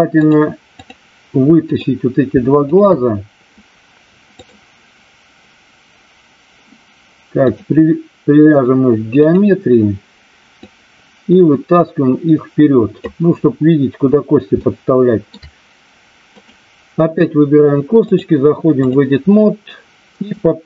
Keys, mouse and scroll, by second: 0.1-0.9 drag, 1.6 click, 4.3 click, 7.6-9.3 drag, 10.6-13.0 drag, 14.7-15.3 shift+middle drag, 16.3 click, 18.0 click, 20.2-20.6 drag.